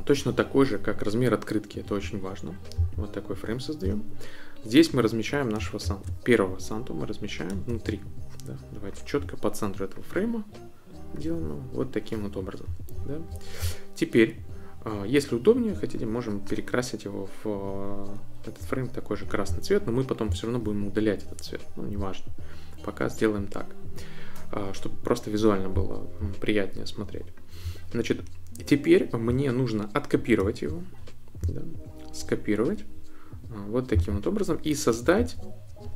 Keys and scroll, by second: 5.9 super+c, 7.7 super+v, 18.6 i, 35.2 Left.